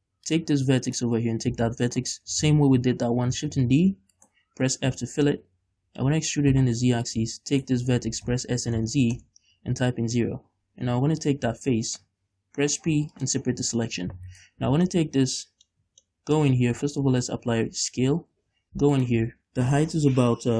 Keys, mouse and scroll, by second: 0.4 click, 1.1-2.2 right drag, 3.4 shift+d, 4.4 right click, 5.0 f, 5.4 middle click, 6.5 e, 7.3 click, 7.7 shift+right click, 8.2 s, 9.3 middle click, 9.4 Return, 10.2 a, 12.1 l, 13.0 p, 13.8 Tab, 14.5 right click, 15.2 middle click, 15.9 Tab, 16.2 middle click, 16.7 Tab, 17.1 ctrl+a, 18.5 Tab, 19.1 alt+right click.